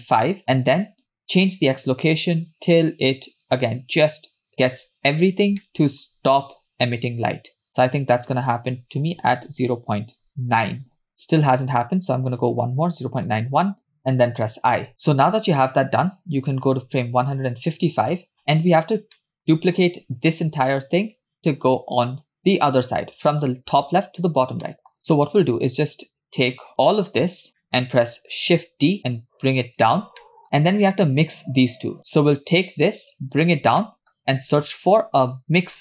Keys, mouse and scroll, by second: 0.2 Left, 0.4 Left, 1.2-4.5 shift+drag, 5.1 scroll up 2, 5.7 shift+middle click, 7.7-11.0 drag, 9.5 BackSpace, 11.6-13.4 drag, 14.9-15.4 scroll down 3, 16.9 click, 17.9 scroll down 2, 18.7-19.2 scroll down 6, 19.2 middle click, 20.9-21.3 scroll down 2, 24.7 middle click, 25.3-26.7 drag, 27.5 scroll down 2, 27.6 middle click, 28.5 shift+d, 30.3 middle click, 30.4 drag, 32.7 click, 33.8 middle click, 34.4 shift+a.